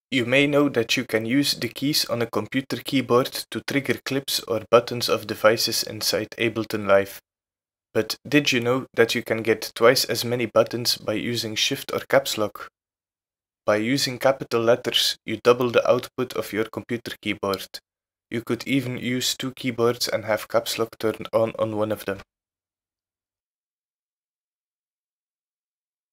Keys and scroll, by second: 7.4-10.7 typing, 15.3 a, 18.1 Caps_Lock, 19.5 a, 20.5 z, 21.3 e, 22.1 r, 23.6 shift+t.